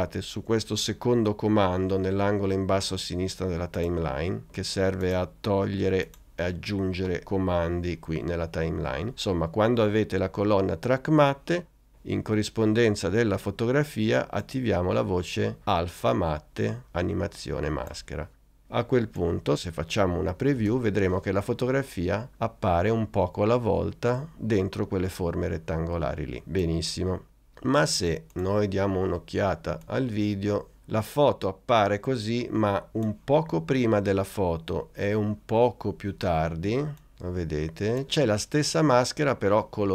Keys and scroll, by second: 20.1 n, 20.6 space.